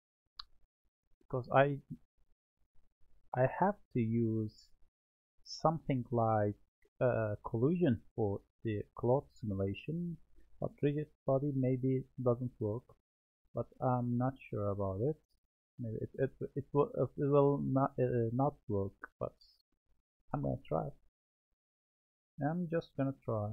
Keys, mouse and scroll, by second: 15.6 click, 16.6-18.2 drag, 22.1-23.5 scroll down 3.